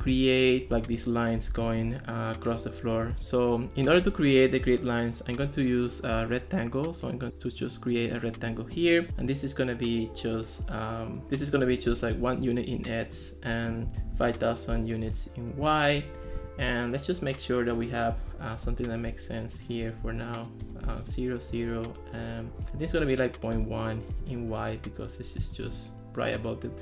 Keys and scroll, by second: 0.1 ctrl+s, 0.8 ctrl+s, 1.6 ctrl+x, 11.2 super+z, 12.2 1, 12.4 Return, 13.7-14.8 typing, 15.1 Return, 18.7 0, 18.9 Return, 20.1 -, 20.7 BackSpace, 20.9 0, 21.1 Return, 22.6-23.4 typing, 23.6 Return.